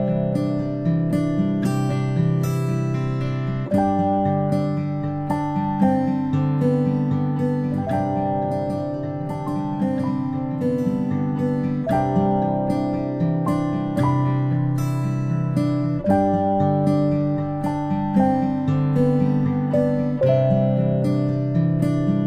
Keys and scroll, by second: 3.5-4.0 ctrl+shift+space, 4.7 ctrl+shift+space, 5.7 p, 20.5 ctrl+z.